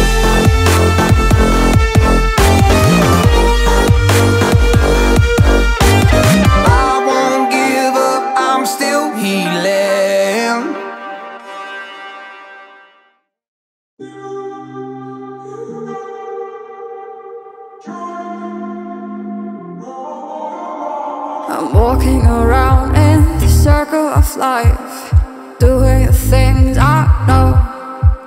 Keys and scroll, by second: 6.0 ], 6.5 ], 8.0 ctrl+z, 15.0 [, 15.4 [.